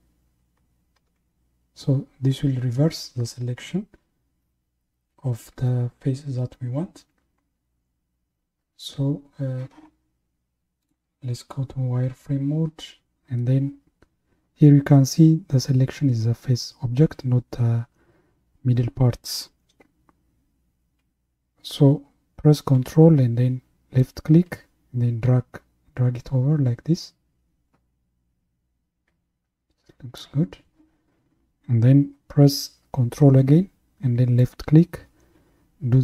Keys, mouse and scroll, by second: 1.0 ctrl+i, 11.6 Left, 24.0 ctrl+click, 34.4 ctrl+click.